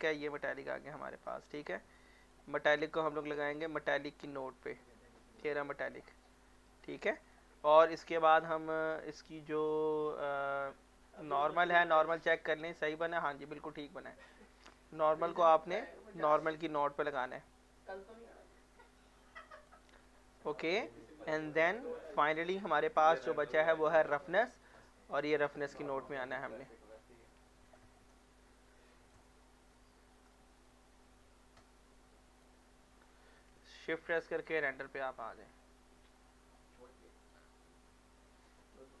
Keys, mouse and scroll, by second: 0.8 middle click, 1.2-1.9 scroll up 1, 1.9 click, 2.7 middle click, 3.7-6.2 drag, 6.2 middle click, 7.0-8.4 drag, 12.3 click, 14.2 click, 16.3 middle click, 16.9 click, 17.5 middle click, 18.6-20.0 drag, 20.0 scroll down 1, 20.6 click, 22.1 click, 25.8 middle click, 26.5 click, 28.0 middle click, 28.6 click, 29.4 middle click, 30.3 click, 31.6-33.2 drag, 33.2 middle click, 33.5 z, 34.1 z, 34.6 scroll down 1, 35.0 middle click, 36.1 scroll up 1, 36.5 middle click, 36.6 middle click, 37.2 click, 37.6 middle click, 38.4 click.